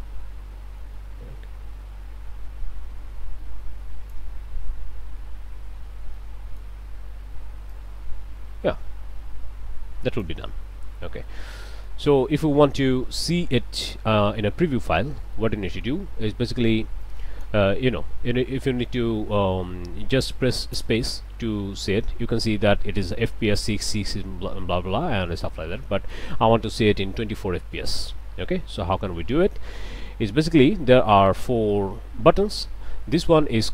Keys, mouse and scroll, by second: 4.6 middle click, 5.6 middle click, 6.2 click, 7.7-10.4 drag, 10.7 middle click, 11.2 middle click, 13.8-14.7 scroll down 2, 14.9-15.2 scroll down 1, 15.3 middle click, 17.0 click, 17.7 middle click, 18.3 scroll down 2, 18.6-19.6 drag, 20.8 space, 25.6 space.